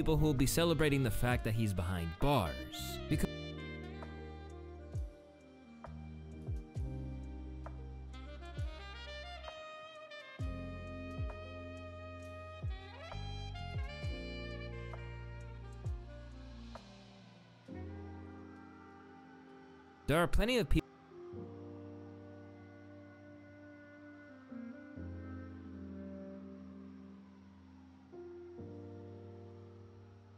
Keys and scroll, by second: 3.5 ctrl+s, 3.6 ctrl+alt+y, 3.6 ctrl+z, 5.8 alt+shift+c, 15.7 p.